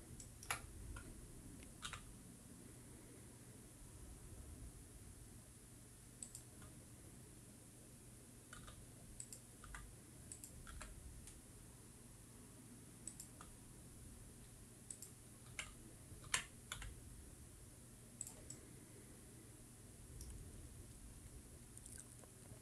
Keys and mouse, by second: 1.3 shift+middle click, 4.4 e, 7.4 click, 9.8 e, 10.3 click, 10.8 r, 11.5 click, 11.8 g, 14.2 click, 15.4 s, 16.0 click, 16.6 w, 17.4 w, 17.9 e, 19.3 click, 19.6-21.3 middle drag.